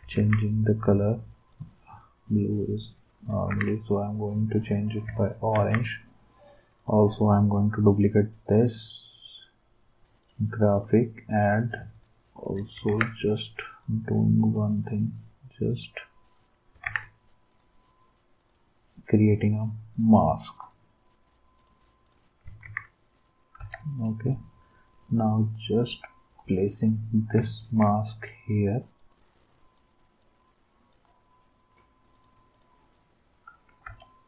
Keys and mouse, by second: 0.1 ctrl+s, 3.4 ctrl+s, 5.5 ctrl+d, 11.9 shift+click, 12.9 ctrl+z, 16.8 ctrl+z, 22.6 ctrl+s, 23.6 v, 33.8 v.